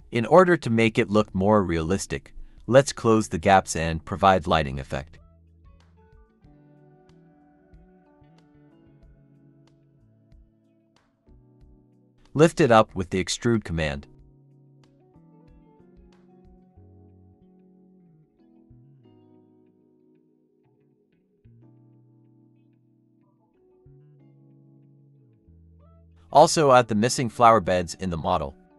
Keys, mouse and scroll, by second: 1.6-2.1 typing, 2.2 double click, 2.7 shift+click, 3.7 typing, 4.4 shift+click, 6.8-7.2 scroll up 1, 7.3 shift+click, 7.6 shift+click, 8.4-9.0 typing, 8.5-9.0 scroll down 1, 9.0 shift+click, 10.1 shift+click, 11.9-12.8 typing, 12.4 shift+click, 16.8 e, 19.4 middle click, 21.2 e, 22.4 scroll down 1, 22.9 Tab, 23.2-23.7 scroll, 26.1-27.1 scroll up 1, 27.8 scroll up 1, 28.0 Tab.